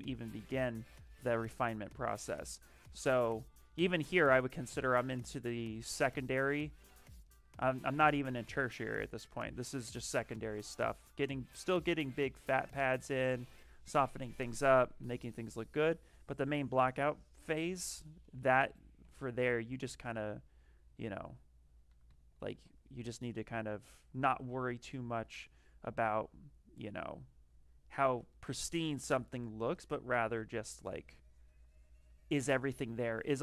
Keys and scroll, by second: 7.6 s, 14.3-15.6 typing, 19.1 ctrl+z, 21.8 d, 22.0 d.